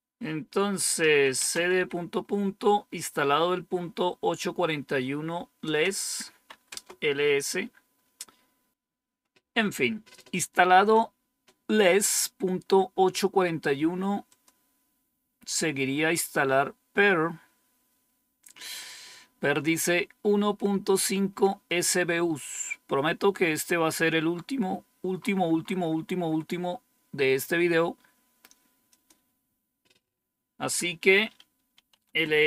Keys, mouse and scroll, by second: 0.7-2.1 typing, 5.5 Return, 6.0-6.9 typing, 8.5-9.2 typing, 14.2 click, 22.1-23.1 scroll down 4, 23.6-24.2 scroll down 2, 24.2 scroll up 2, 25.0-26.3 scroll up 2, 26.3-28.8 scroll up 1, 28.8 click, 31.4-32.4 typing.